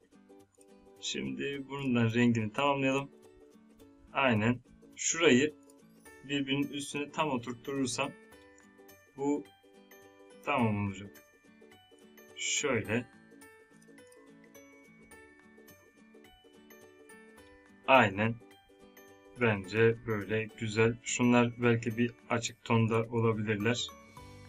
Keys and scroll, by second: 19.2 space.